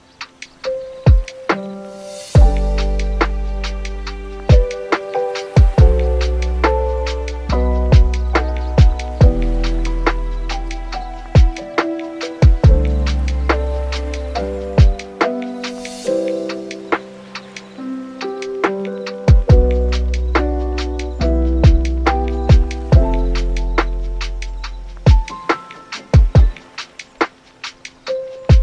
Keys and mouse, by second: 0.2 click, 3.0 click, 3.8 click, 4.8 click, 5.4 click, 5.9 click, 7.6 click, 8.6 n, 8.7 n, 9.2 super+s, 18.1 click, 18.7 click.